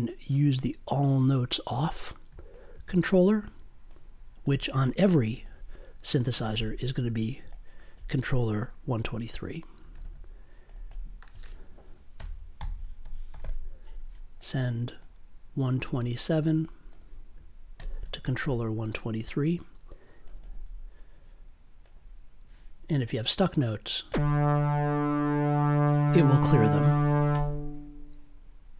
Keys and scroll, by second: 9.8 1, 11.1 3, 12.1 BackSpace, 12.5 m, 13.0 1.